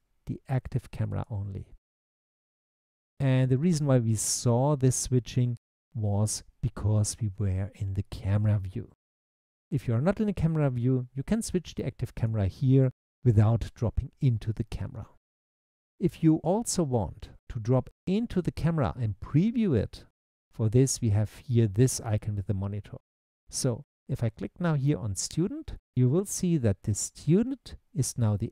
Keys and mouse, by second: 1.2 click, 2.7 click, 12.2 click, 13.0 click, 27.2 click.